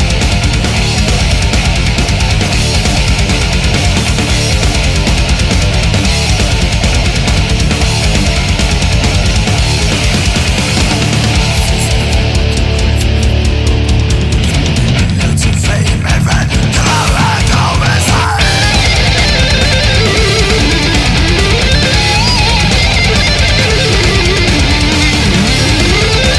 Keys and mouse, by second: 3.7 ctrl+z, 6.4 ctrl+z, 7.2 ctrl+z, 12.6 ctrl+s, 15.2 ctrl+z, 15.5 ctrl+z, 16.6 ctrl+z, 20.4 ctrl+s, 22.2 ctrl+z, 23.2 ctrl+z, 24.1 ctrl+z, 24.7 ctrl+z, 25.1 ctrl+z, 25.4 ctrl+z.